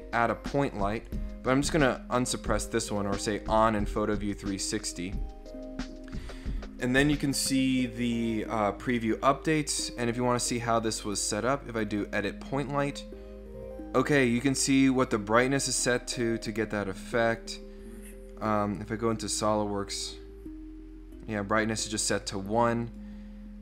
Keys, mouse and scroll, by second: 1.1 right click, 3.4 click, 10.0 right click, 11.9 click, 16.6 click, 18.7 click, 22.8 click.